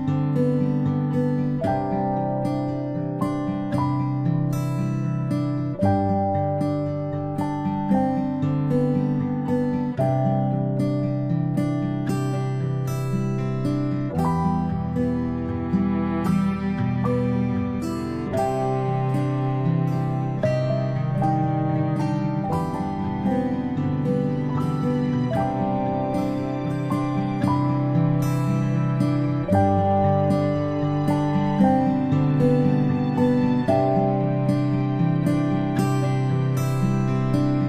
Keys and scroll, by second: 0.7 space, 1.0 space, 6.0-6.8 space, 7.0-8.5 ctrl+space, 9.5 p, 22.3-23.2 space, 23.5 ctrl+z, 23.5 space, 23.9 ctrl+z, 27.0 space, 27.2 space, 27.3 space, 35.5 ctrl+space, 36.8 a.